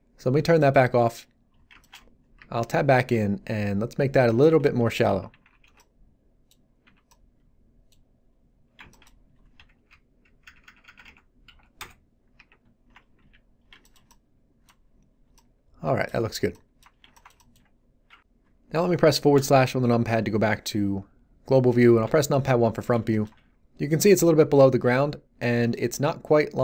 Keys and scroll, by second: 2.3 Tab, 3.1 7, 5.2 a, 5.4 z, 5.6 b, 9.5 g, 9.8 Down, 11.4 Up, 11.7 Return, 12.3 Tab, 13.2 z, 19.3 /, 22.0 1, 24.7 z.